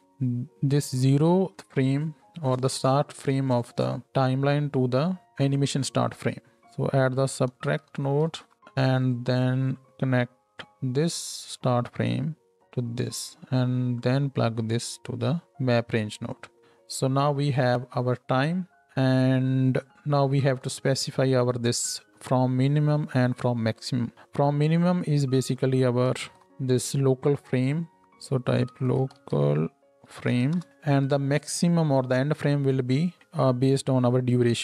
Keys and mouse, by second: 0.0-9.1 middle drag, 9.1-11.6 drag, 11.6-16.6 middle drag, 16.6-18.8 ctrl+drag, 17.1 ctrl+h, 18.8-27.8 middle drag, 27.8-34.6 drag, 28.0-31.1 right drag, 33.2-34.6 right drag.